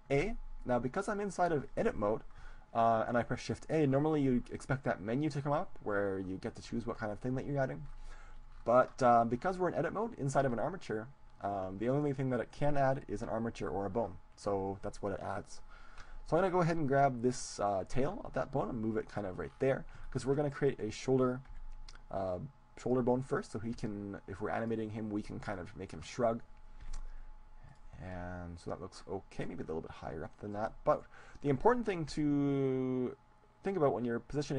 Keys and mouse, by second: 0.2 shift+a, 8.1-18.3 middle drag, 18.3 g, 19.5-21.5 drag, 20.7 middle click, 20.7-22.5 right drag, 21.7 g, 23.3-26.6 drag, 23.3-25.4 right drag, 23.9 g, 26.9 g, 27.7-32.2 drag, 29.3-32.7 right drag, 32.2 g, 32.9 g.